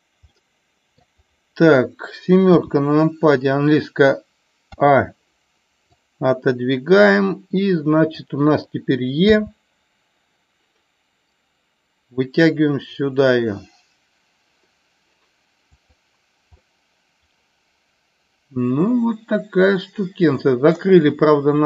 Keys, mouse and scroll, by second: 0.4 middle click, 2.5 KP_7, 4.7 a, 6.0-8.2 drag, 15.7 click, 16.6-20.7 middle drag.